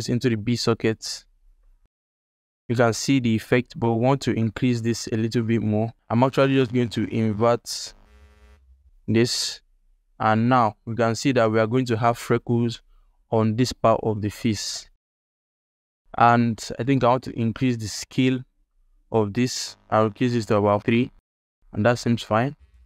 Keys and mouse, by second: 1.5 ctrl+click, 3.6 click, 3.7 alt+middle click, 4.9 alt+shift+middle click, 5.9 shift+a, 10.3 ctrl+alt+click, 10.7-11.3 drag, 14.1 ctrl+click, 14.7-15.0 drag, 15.0 g, 15.5 ctrl+alt+click, 15.8 alt+shift+click, 16.1 alt+shift+click, 16.6 drag, 17.2 ctrl+alt+click, 18.7-20.9 drag, 21.3 alt+click, 22.2 ctrl+click, 22.7 alt+shift+click, 22.8 alt+middle click.